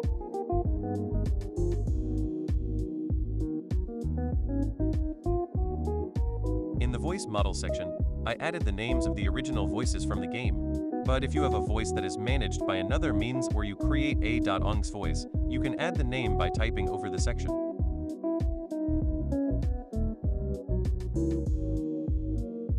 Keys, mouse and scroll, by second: 0.5-3.5 drag, 4.2 click, 6.2 click, 6.9 click, 7.3-9.3 typing, 7.3 click, 11.1-12.3 typing, 13.6-14.7 typing, 18.5 BackSpace, 20.9 click.